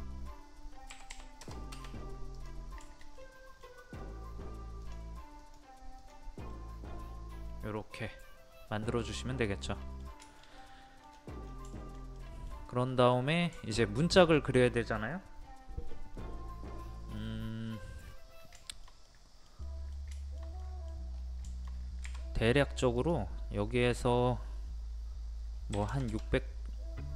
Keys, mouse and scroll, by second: 0.9 KP_1, 2.4 click, 2.8-4.5 middle drag, 4.8 click, 6.6-10.2 middle drag, 11.1-11.4 scroll down 1, 11.7 shift+middle click, 12.8-13.2 scroll up 1, 13.6 shift+middle click, 17.7-18.4 scroll down 1, 18.4 middle click, 20.2 shift+middle click, 21.1-21.5 scroll up 1, 23.0 click, 25.7 KP_6.